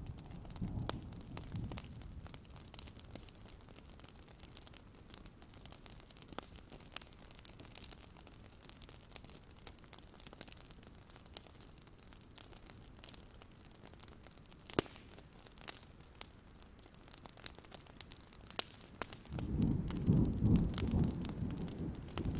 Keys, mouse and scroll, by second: 2.1 KP_5, 3.0-4.6 drag, 4.8 KP_8, 5.4 click, 8.8 alt+scroll up 1, 9.3 alt+scroll down 1, 9.5 click, 12.4-12.9 ctrl+scroll up 2, 12.9 alt+scroll down 1, 13.3 click, 14.4 Delete, 14.9 alt+scroll down 1, 15.1 click, 16.9 Delete, 17.2 click, 17.9 Delete, 18.3 scroll down 1, 18.6 click, 19.3 Delete, 19.8 click.